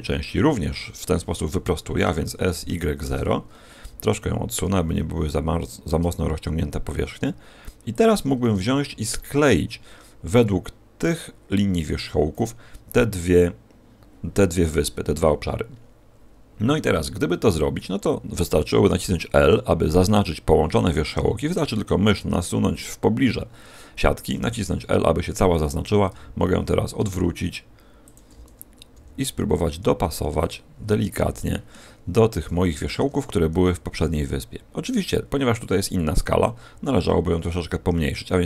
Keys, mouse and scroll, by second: 2.0 s, 4.6 g, 7.9 shift+click, 8.4 a, 8.6-9.5 scroll down 1, 9.5-9.8 scroll down 1, 28.8 ctrl+click, 28.8 g, 30.4 click, 30.8-32.0 scroll up 4, 31.3 shift+middle click, 32.0-32.6 scroll up 3, 32.6 shift+middle click, 36.0 click, 36.8 s.